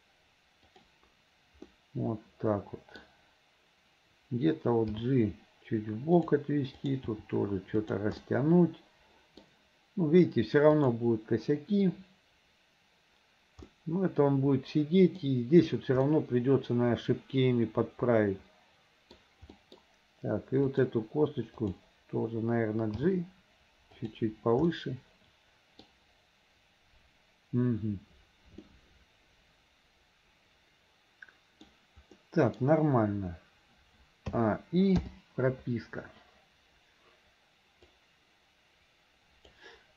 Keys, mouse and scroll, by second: 1.7-3.1 middle drag, 5.3 g, 6.8 click, 7.9 g, 8.2-9.5 middle drag, 10.8 click, 13.7-15.2 middle drag, 16.1-19.2 middle drag, 19.6 middle click, 20.7 click, 21.6 click, 23.5 g, 24.7-26.0 middle drag, 28.7-31.7 middle drag, 32.2-32.7 scroll up 1, 34.4 a, 35.1 i, 38.0-39.6 drag.